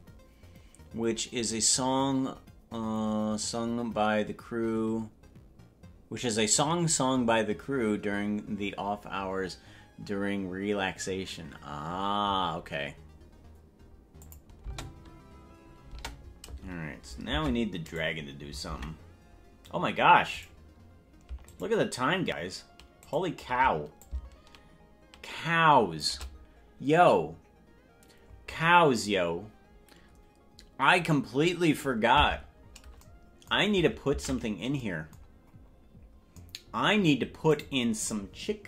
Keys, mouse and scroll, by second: 14.3 click, 14.7 space, 16.3 space, 17.5 ctrl+Tab, 18.1 right click, 18.9 ctrl+Tab, 20.7 right click, 21.9 shift+right click, 23.5 right click, 24.2-26.2 shift+drag, 34.3 ctrl+Tab, 35.5 scroll down 4, 35.9 scroll down 4, 37.6 click.